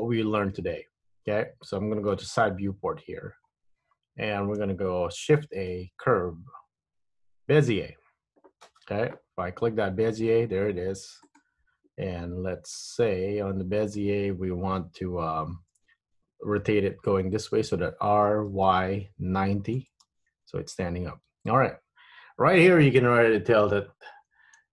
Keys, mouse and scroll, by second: 2.2 KP_3, 3.5-4.1 scroll down 2, 4.1-5.0 scroll up 2, 5.3 shift+a, 9.6 g, 12.9 middle click, 15.7 KP_3, 18.1 r.